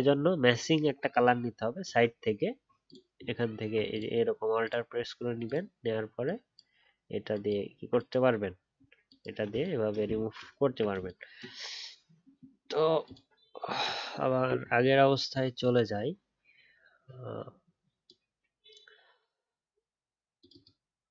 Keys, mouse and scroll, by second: 0.1 alt+scroll up 1, 1.8 alt+click, 3.9 alt+click, 10.0 click, 10.0-10.3 alt+scroll down 1.